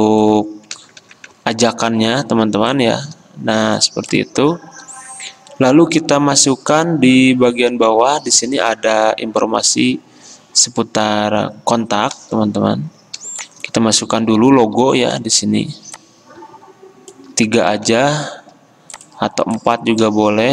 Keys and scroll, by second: 1.1 ctrl+g, 20.0 l, 20.0 v.